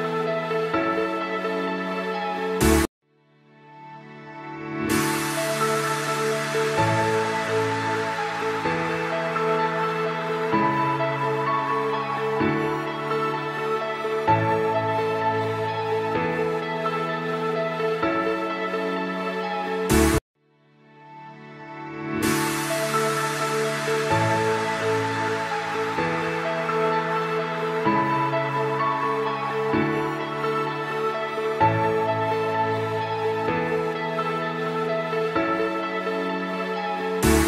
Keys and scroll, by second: 3.6 F3, 4.9 ctrl+g, 18.3 Escape, 25.5 shift+F2, 26.1 F3, 31.2 Escape, 31.8 F2, 33.2 Escape.